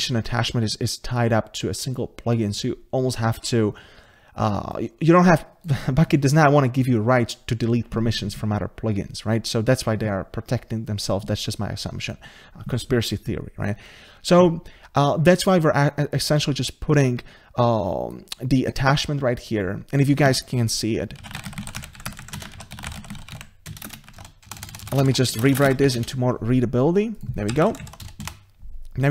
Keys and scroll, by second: 20.3 ctrl+c, 23.7 Escape, 25.3 Return, 25.7 ctrl+v.